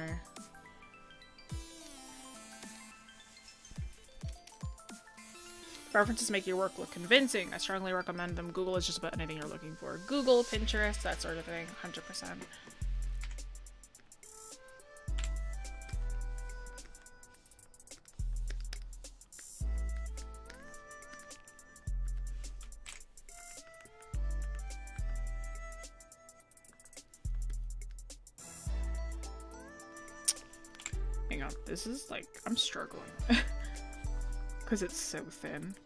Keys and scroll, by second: 0.1 scroll up 1, 15.8 scroll, 18.3-18.6 scroll, 31.3 scroll up 1, 33.3 scroll down 1, 34.0 scroll up 1.